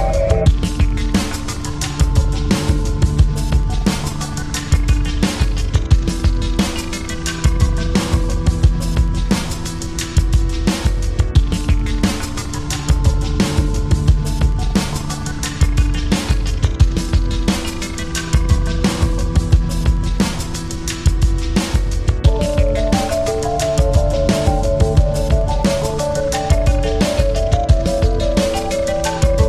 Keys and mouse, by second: 0.3 click, 1.4 click, 2.9 click, 4.1 click, 4.2 ctrl+=, 5.0 space, 5.4 click, 5.5 space, 6.1 space, 7.1-9.9 drag, 10.9-12.8 drag, 12.9-14.8 drag, 15.9 space, 16.1 click, 16.4 space, 16.9 space, 17.3 space, 17.6 click, 18.8 click, 19.9 ctrl+z, 21.1-23.3 drag, 23.3 space, 23.5 click, 23.8 space, 25.6-27.3 drag, 27.9 click, 29.0 click.